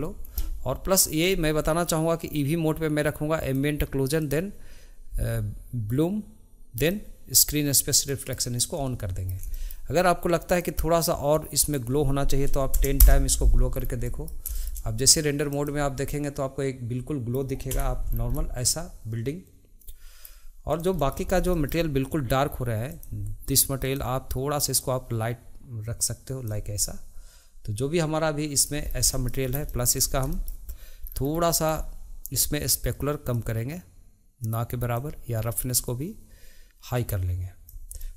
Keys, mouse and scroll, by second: 8.0-10.5 middle drag, 13.7-14.0 scroll down 2, 14.0-15.6 middle drag, 16.1-17.7 middle drag, 17.7 Tab, 18.1 scroll down 2, 18.3-20.7 middle drag, 20.7 click, 21.0-21.3 middle drag, 21.3 scroll up 2, 21.5-22.9 shift+middle drag, 22.9 click, 23.8 click, 26.8-28.8 middle drag, 28.8 scroll down 1, 29.1-29.5 middle drag, 29.5 scroll up 1, 29.6-30.0 shift+middle drag, 30.0 scroll up 1, 30.3 shift+middle click, 31.0-32.4 scroll down 1, 32.4-33.3 scroll down 1, 33.3-38.0 drag, 38.0-38.1 middle drag.